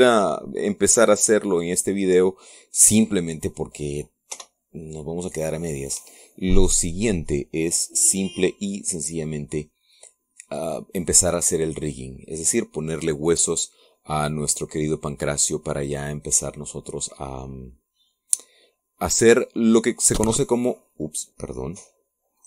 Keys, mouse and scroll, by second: 5.1 p, 6.8 Escape, 14.0-20.5 middle drag.